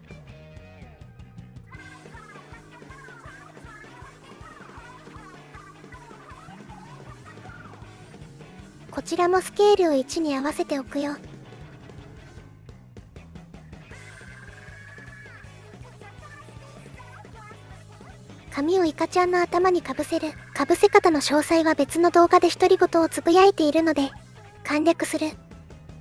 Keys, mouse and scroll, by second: 0.0-1.2 drag, 10.7-13.4 drag, 15.8 shift+middle click, 17.8 middle click, 19.7 middle click, 20.9 middle click.